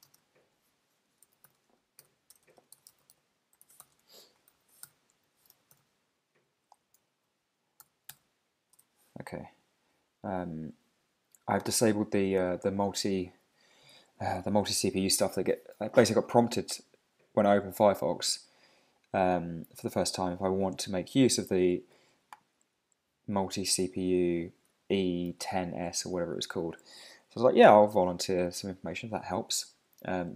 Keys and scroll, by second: 1.5 Tab, 6.5 ctrl+super+Down, 7.0 super+], 8.1 super+s, 8.7 super+Tab, 24.1 super+`, 25.3 super+r.